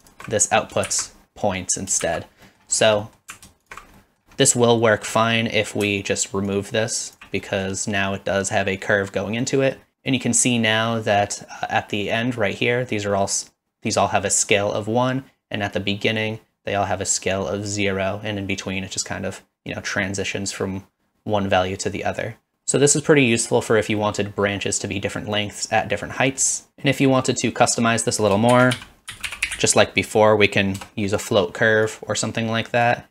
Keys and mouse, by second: 0.0 alt+shift+click, 0.9 shift+z, 2.1 shift+z, 2.5 middle click, 3.1 middle click, 3.7 alt+shift+click, 4.0 middle click, 4.5 middle click, 5.2 middle drag, 6.5 alt+click, 7.5 middle click, 9.4-9.8 middle drag, 24.0 middle click, 26.3 middle click, 26.7 ctrl+x, 27.1 middle click, 28.5 shift+a, 33.0 click.